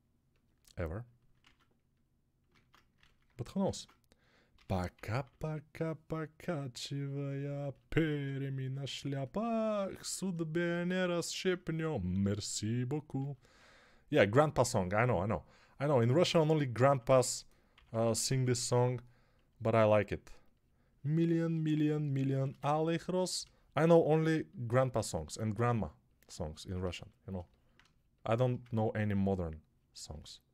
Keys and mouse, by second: 1.0-7.2 ctrl+middle drag, 2.6 ctrl+Tab, 4.4-5.3 typing, 7.2-30.5 ctrl+alt+drag, 13.1 alt+q, 16.9-18.5 typing.